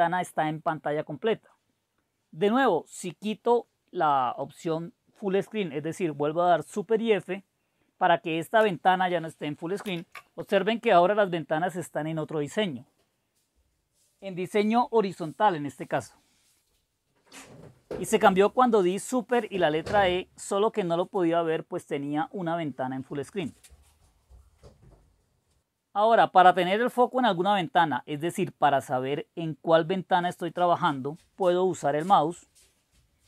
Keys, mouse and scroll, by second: 10.0 super+f.